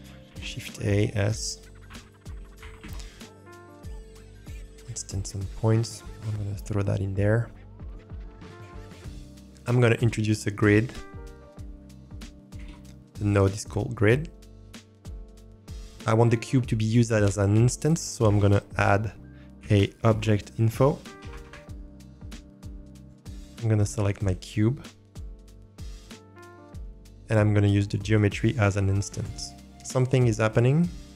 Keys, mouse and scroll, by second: 0.3 shift+a, 7.8 click, 8.5 click, 10.1 shift+a, 18.2 shift+a, 23.7-26.8 drag, 28.1-29.2 drag, 29.9-30.3 scroll up 1.